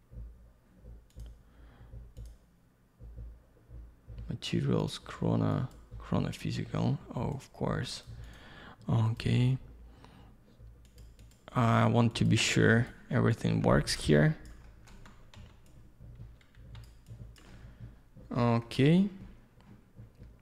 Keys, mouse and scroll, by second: 1.1 click, 1.2 click, 2.2 click, 2.2 click, 4.8 click, 4.9 click, 5.5 click, 5.7 click, 7.3 click, 7.4 click, 7.9 click, 8.0 click, 8.2 click, 8.3 double click, 9.1 click, 9.1 click, 10.8 click, 11.0 click, 11.2 click, 11.3 click, 12.1 click, 12.2 click, 12.8 click, 12.9 click, 13.3 click, 14.6 alt+middle click, 15.7 click, 16.5 x, 17.1 click, 17.5 alt+middle click, 18.8 middle click.